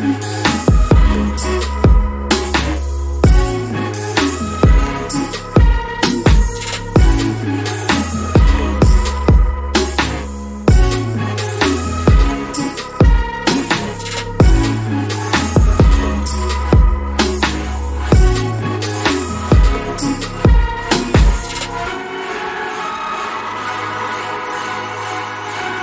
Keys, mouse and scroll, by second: 1.1 click, 10.9 alt+scroll down 1, 11.4 alt+scroll up 1, 12.0 scroll down 1, 13.3 click, 19.1 BackSpace, 22.1 click.